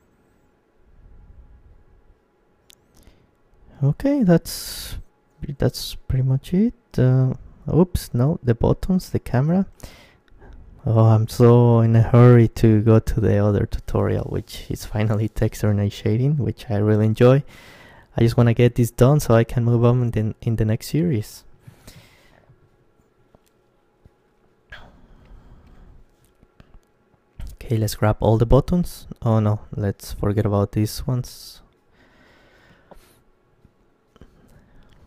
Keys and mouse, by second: 1.3-5.4 middle drag, 5.4-6.5 drag, 6.2 KP_Decimal, 6.5 right click, 8.1-11.2 right drag, 11.2 z, 11.8-14.1 middle drag, 14.1 right click, 14.6 KP_1, 15.4 z, 19.4 g, 20.6-21.6 drag, 21.6-27.6 middle drag, 22.3-23.3 drag, 22.3-23.3 right drag, 27.6 right click, 27.8 middle click, 28.7-30.7 right drag, 30.7 middle click, 30.7 z, 31.2 b, 33.7 Tab, 34.3 Tab.